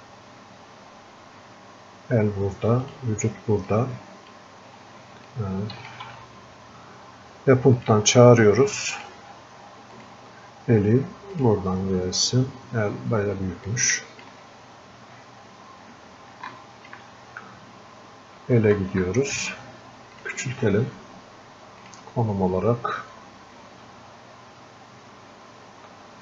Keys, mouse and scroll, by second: 9.1-11.6 drag, 12.6 scroll up 1, 14.1-26.2 drag.